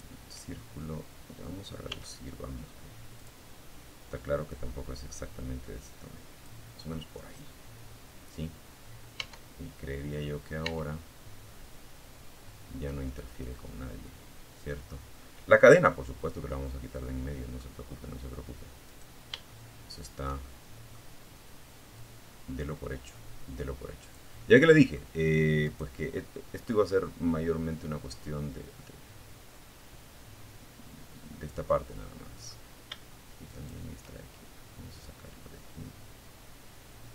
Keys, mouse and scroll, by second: 0.0 s, 1.4 click, 2.6-4.8 drag, 5.5-6.2 scroll up 2, 7.3 Tab, 8.8 Tab, 9.6-15.9 middle drag, 16.0-16.4 scroll up 1, 17.0 right click, 17.6-19.3 shift+middle drag, 20.2-22.5 drag, 22.6 middle click, 23.8 right click, 24.4 middle click, 27.0-30.7 middle drag, 30.7 click, 31.6-32.7 shift+right drag, 33.2-37.1 drag.